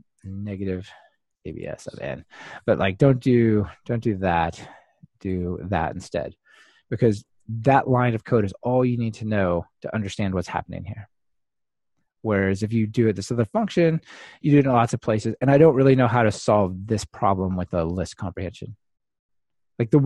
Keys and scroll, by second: 2.5 Escape, 4.2 super+d, 5.3 ctrl+alt+shift+Right, 5.5 super+v.